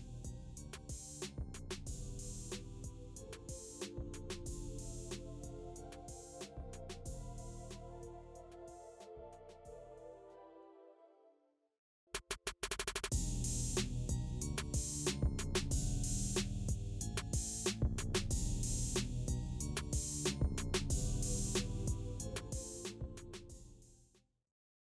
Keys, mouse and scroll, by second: 1.9 click, 7.2-11.3 drag, 7.8 typing, 12.7 scroll up 1, 13.8-18.1 drag, 21.5 space.